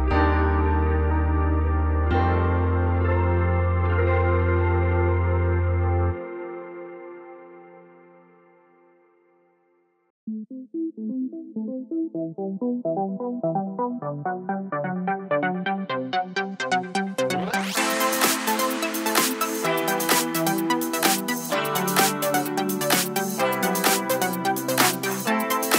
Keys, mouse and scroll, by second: 1.3 click, 1.8 ctrl+i, 2.1 x, 3.3-8.2 drag, 7.6 KP_Enter, 8.2 middle click, 9.1-10.6 drag, 9.5 Tab, 10.0 shift+n, 10.2 Tab, 10.9 ctrl+j, 11.0 click, 11.2-13.9 middle drag, 11.4-11.7 scroll down 2, 12.3 scroll up 2, 13.0 ctrl+s, 14.1-14.7 middle drag, 14.7 click, 14.7-16.9 middle drag, 14.9 Tab, 15.0-16.7 scroll up 2, 16.7 2, 16.9 click, 17.1 shift+click, 17.4 shift+click, 17.6 shift+click, 17.9-19.1 middle drag, 18.7 ctrl+x, 19.1 3, 19.1 click, 20.1 click, 20.6-22.2 middle drag, 20.6 e, 22.2 click, 22.3-25.7 middle drag, 23.2 ctrl+z.